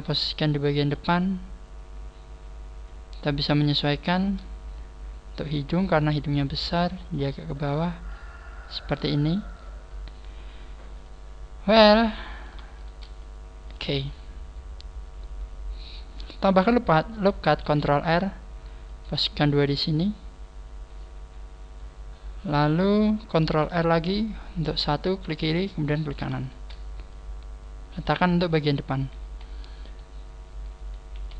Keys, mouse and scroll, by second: 3.5 right click, 4.0 shift+right click, 5.8 click, 7.6 right click, 8.1 click, 8.6 click, 9.3 right click, 11.1 click, 12.4 right click, 12.8 shift+right click, 13.2 click, 13.2 click, 17.6 ctrl+n, 18.8 ctrl+r, 19.0 click, 23.6 ctrl+r, 24.6 ctrl+r, 25.6 right click, 26.4 shift+right click, 27.1 click, 28.8-29.2 scroll up 3, 29.2 z, 29.9 right click, 31.2 z.